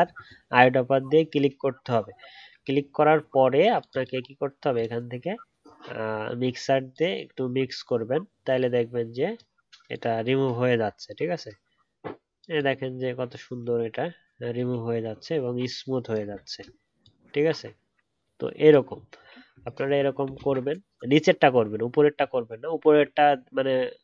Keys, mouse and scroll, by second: 16.3 alt+scroll down 1, 16.5 alt+scroll up 1, 18.8 alt+scroll down 1, 19.1 alt+scroll up 1, 19.5 alt+scroll down 1, 22.1-22.6 alt+scroll down 1.